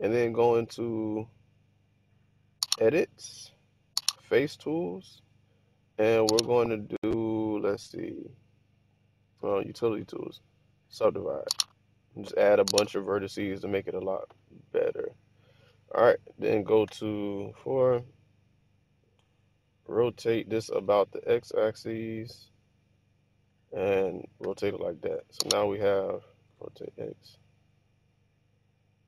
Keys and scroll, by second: 17.0 Tab, 20.0 r, 21.0 x, 24.4-25.4 typing, 26.5-26.9 typing.